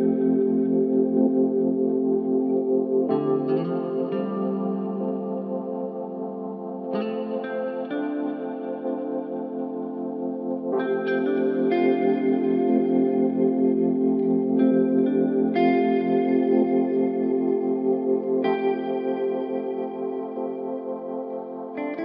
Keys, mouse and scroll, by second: 0.7 click, 2.2 Tab, 3.1 a, 4.7 shift+d, 12.6 KP_7, 14.2 click, 14.7-15.3 scroll up 2, 15.8 r, 19.9 ctrl+KP_7, 20.9 scroll down 2.